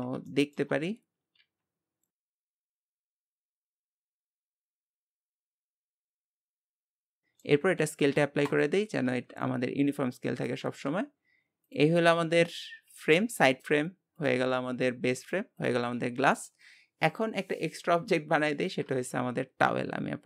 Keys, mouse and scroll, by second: 0.3 shift+middle click, 0.8 scroll up 2, 1.4 s, 2.6-3.0 scroll up 3, 2.8 shift+middle click, 3.1 s, 4.5 scroll up 2, 4.6 shift+middle click, 4.9 s, 5.7-6.3 scroll down 11, 5.9 click, 6.0 middle click, 6.3 shift+middle click, 6.8 click, 7.3 shift+middle click, 7.8 ctrl+a, 11.6-12.9 drag, 12.9 g, 14.2 click, 14.7 g, 15.6 click, 15.8 g.